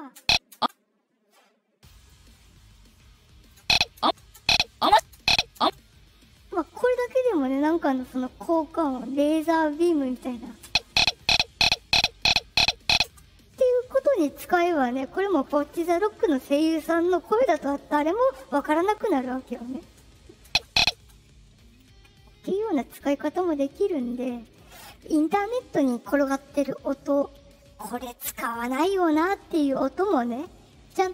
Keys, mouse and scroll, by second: 0.1 space, 0.5 space, 1.9 click, 2.7 click, 3.5-5.5 typing, 6.6 ctrl+click, 8.0-9.3 right drag, 10.6 space, 13.0 space, 20.4 space, 20.9 space, 22.7-24.0 right drag.